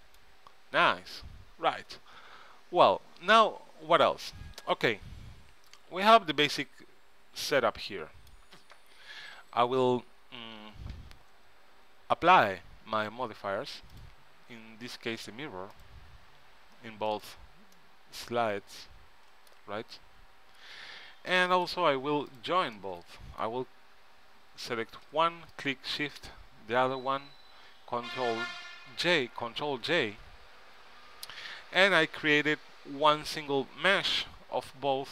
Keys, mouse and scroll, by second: 4.8 ctrl+Up, 5.8-7.9 middle drag, 14.2-19.2 middle drag, 22.5-24.7 drag, 25.7-30.0 right drag, 30.1 ctrl+j, 31.3 ctrl+Up, 32.0 middle click, 34.0 Tab.